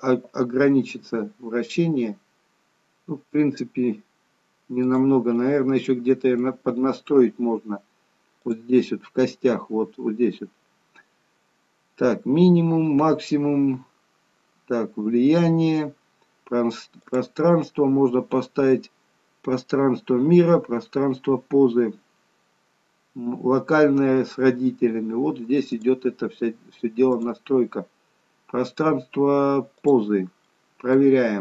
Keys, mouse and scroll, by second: 1.0 g, 5.2 middle click, 8.5 click, 13.7-15.7 scroll down 2, 16.9 click, 27.2 click, 30.3 middle click, 31.2 g.